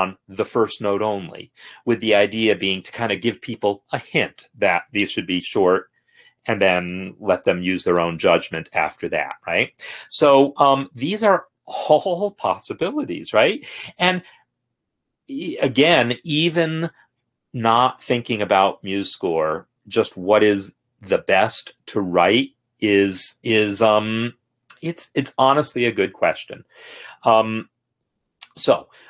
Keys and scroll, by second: 14.3 ctrl+z, 14.7 ctrl+z, 14.9-16.0 ctrl+z.